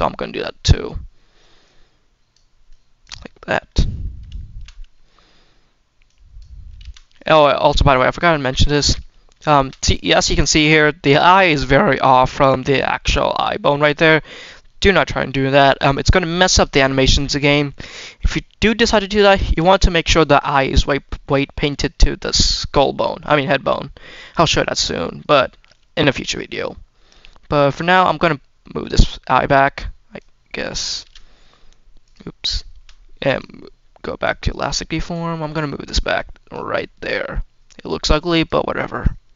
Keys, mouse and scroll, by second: 1.5 click, 2.5 click, 3.1 middle click, 3.6 scroll up 2, 3.9 middle click, 4.2 shift+middle click, 4.6 middle click, 5.9 click, 6.7 ctrl+z, 6.8 middle click, 7.4 scroll down 1, 7.5 middle click, 7.9 scroll up 1, 8.0 middle click, 8.6-8.9 scroll up 2, 8.9 middle click, 9.4 shift+middle click, 9.6-10.0 scroll up 2, 10.0 middle click, 10.2-10.6 scroll down 2, 10.6 middle click, 11.3-11.8 scroll up 2, 11.7 middle click, 12.2 middle click, 12.8 middle click, 13.6-14.4 scroll down 4, 14.3 scroll up 2, 16.1 middle click, 16.6 middle click, 17.6 middle click, 17.9-18.8 scroll up 4, 18.4 middle click, 18.8 scroll down 1, 19.3-19.8 scroll down 1, 19.8 middle click, 20.3 scroll up 2, 20.6 scroll down 1, 22.5-23.0 scroll down 2, 23.0 middle click, 23.5 scroll up 1, 23.8-24.9 scroll down 4, 23.8 middle click, 24.6 middle click, 24.9-25.3 scroll up 2, 25.9 scroll up 1, 26.3 middle click, 27.0 middle click, 27.5 middle click, 28.7 click, 29.0-29.4 scroll up 1, 29.4 scroll down 1, 30.0 click, 30.9 ctrl+z, 31.0-31.9 scroll down 1, 31.9 click, 33.2 click, 33.4 scroll up 1, 33.5 middle click, 34.1-35.5 drag, 35.8 click, 36.9-38.3 drag, 38.9 click.